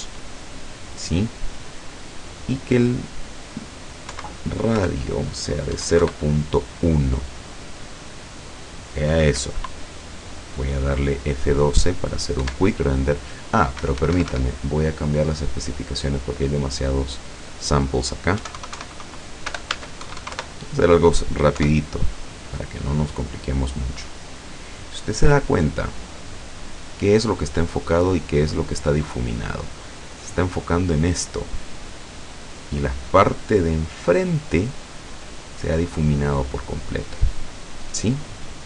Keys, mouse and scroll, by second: 2.5 click, 4.2 Right, 4.9 BackSpace, 5.8 KP_1, 6.1 KP_Enter, 12.5 F12, 13.9 Escape, 15.3 click, 15.8-16.5 scroll down 4, 17.0 click, 18.4-20.1 typing, 19.7 Tab, 20.5 KP_Enter, 21.6 F12.